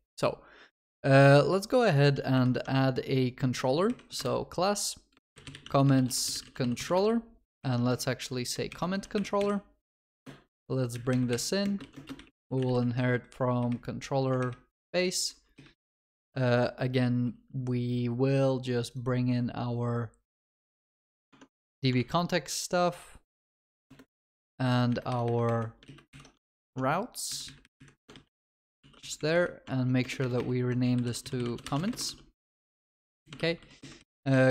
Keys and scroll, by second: 2.5 alt+Insert, 14.8 Tab, 21.1 ctrl+c, 21.4 ctrl+Tab, 22.0 ctrl+v, 23.6 alt+Return, 24.5 ctrl+Tab, 26.4 ctrl+Tab, 26.4 ctrl+c, 26.7 ctrl+Tab, 28.9 ctrl+s, 30.0 ctrl+BackSpace, 32.2 ctrl+s, 33.4 ctrl+w.